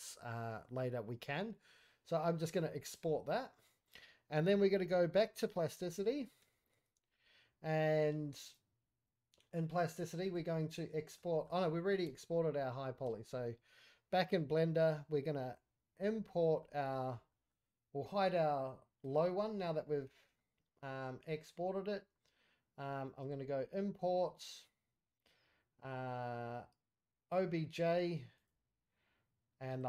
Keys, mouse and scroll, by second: 16.0 scroll down 2, 16.2-16.6 scroll up 1, 16.6 middle drag, 17.0-17.3 scroll up 2, 17.3 middle click, 19.0 click, 19.7-20.3 middle drag, 23.3 q.